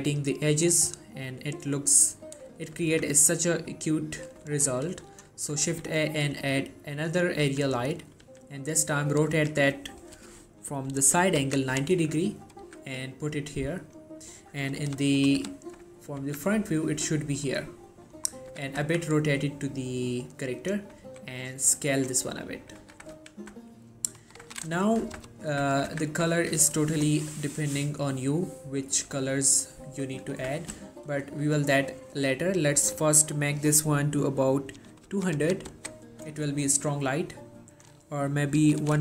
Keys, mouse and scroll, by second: 2.4 scroll down 1, 2.7 shift+middle click, 3.0 z, 3.7-4.6 middle click, 5.8 shift+a, 7.1 click, 7.6-8.4 typing, 9.2 right click, 9.4 r, 12.7 typing, 13.9 click, 15.9 scroll up 1, 16.3 g, 17.4 click, 17.6 scroll down 1, 17.9 middle click, 18.4 scroll down 1, 18.6 r, 18.9 z, 20.7 click, 21.2 s, 22.0 click, 22.3-22.8 scroll down 1, 22.8 middle click, 22.9 g, 23.3 y, 23.6 click, 26.0 z, 31.6-32.0 scroll up 1, 32.8 click, 37.9 click.